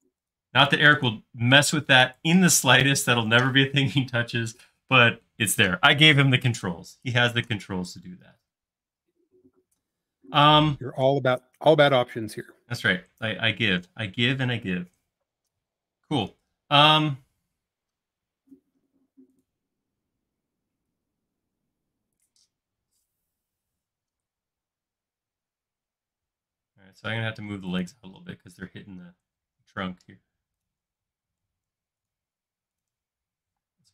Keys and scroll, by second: 0.1 space, 33.5 shift+m.